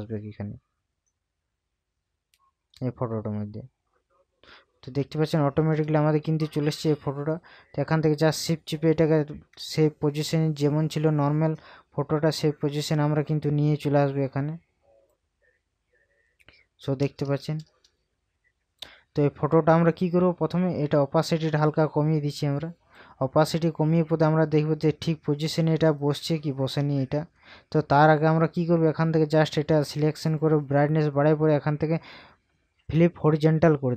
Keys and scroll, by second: 6.3 ctrl+KP_Subtract, 17.0 ctrl+KP_Add.